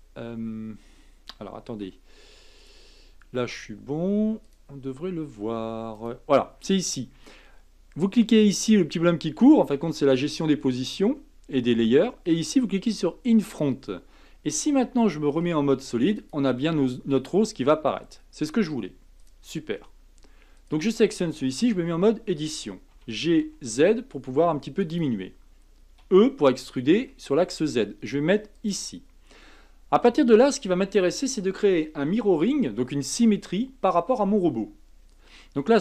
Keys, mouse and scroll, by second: 1.8 z, 4.4 click, 6.0-9.0 drag, 13.4 click, 15.3 z, 20.5 click, 21.7 Tab, 22.9 g, 26.0 e.